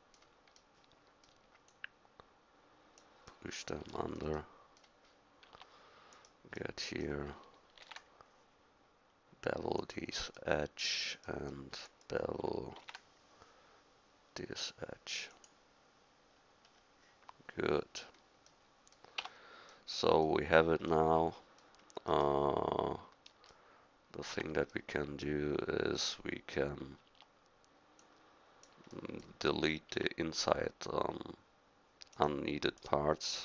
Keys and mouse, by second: 1.7-3.5 right drag, 5.5 Tab, 7.8 ctrl+b, 11.5 middle click, 12.8 ctrl+b, 16.7-18.6 middle drag, 19.2 Tab, 24.3 Tab, 27.1 Tab, 29.9 Tab.